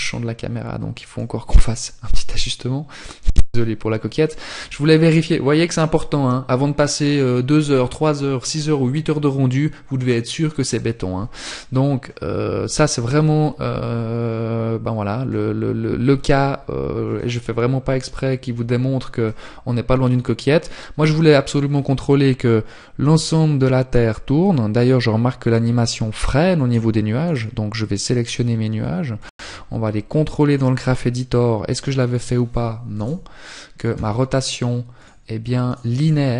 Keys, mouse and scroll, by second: 25.9 right click, 27.1-27.5 scroll down 1, 27.5 click, 28.7 click.